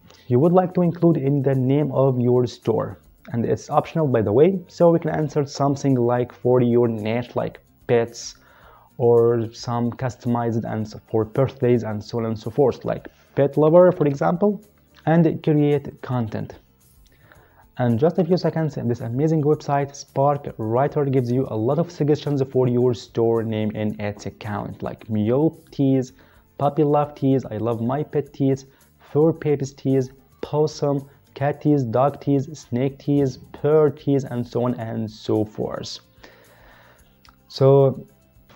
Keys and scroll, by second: 13.6-14.8 typing.